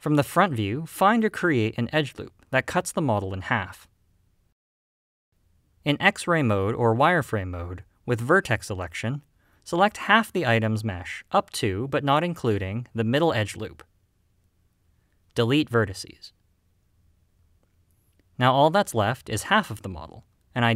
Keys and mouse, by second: 0.9 click, 1.8 click, 3.7 middle click, 5.7 middle click, 7.8 click, 8.6 click, 10.5 click, 11.6-12.8 drag, 16.0 x.